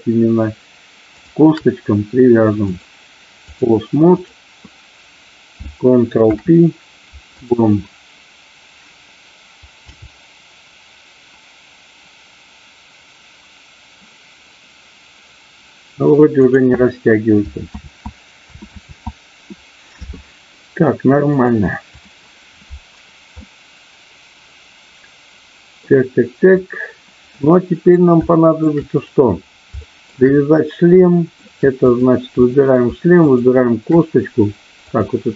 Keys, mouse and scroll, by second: 1.1 shift+click, 2.6-3.6 drag, 6.2 ctrl+p, 10.0 g, 16.5 click, 19.0 ctrl+z, 20.5 ctrl+z, 21.3 click, 23.3-25.8 middle drag, 27.3 middle click, 28.2 shift+middle click, 29.8 shift+middle click, 31.1 shift+middle click, 31.7 click, 32.3 middle click, 33.3 shift+click.